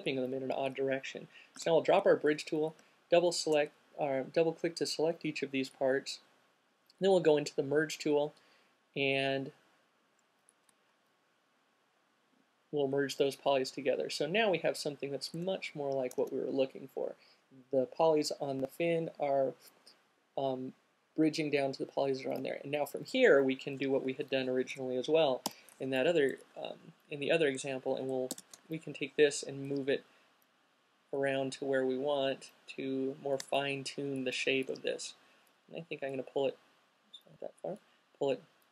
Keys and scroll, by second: 1.8 q, 2.3 alt+q, 16.3 space, 16.5 space, 22.5 space, 26.6 e, 28.5 w.